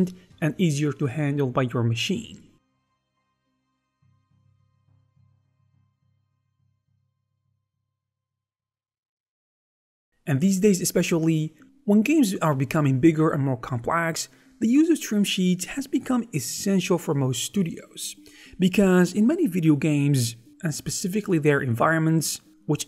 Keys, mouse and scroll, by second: 0.1 ctrl+r, 0.7 ctrl+r, 1.1 ctrl+r, 1.4 click, 1.5 right click, 1.5 e, 1.8 right click, 1.9 middle click, 2.0 scroll up 1, 2.1 shift+right click, 2.1 x, 2.4 middle click, 2.7 Tab, 2.9 scroll up 1, 3.0 shift+middle click.